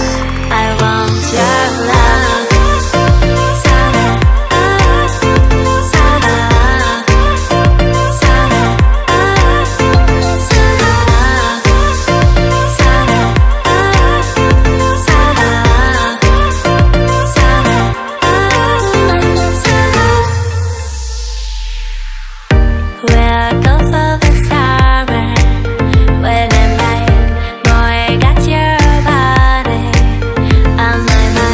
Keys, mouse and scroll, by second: 1.1 click, 3.5 click, 5.0 click, 6.4 click, 8.6 click, 10.6 click, 10.9 click, 12.9 click, 13.2 click, 14.4 click, 17.0 click, 18.0 click, 18.5 click, 20.3 click, 20.9 click, 22.5 click, 23.1 click, 23.5 double click, 24.1 click, 24.7 double click, 25.4 double click, 26.1 double click, 27.5 click, 28.2 click, 29.2 click, 30.9 click.